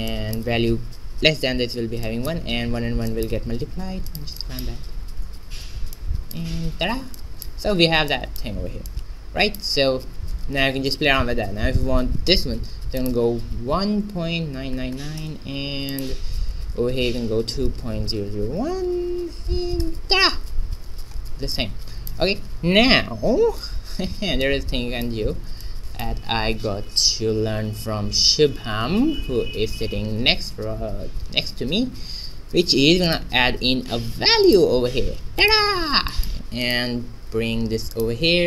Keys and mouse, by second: 0.0-4.0 middle drag, 4.0-6.0 drag, 5.5 shift+z, 6.0-8.9 middle drag, 9.4-12.4 drag, 12.9-14.6 drag, 14.7 9, 15.9-17.6 drag, 18.8 0, 21.5 middle click, 26.3 shift+a, 28.0 shift+z, 28.3 shift+a, 36.0 click, 36.3 middle click, 36.3 x, 36.6 click, 37.2 shift+d.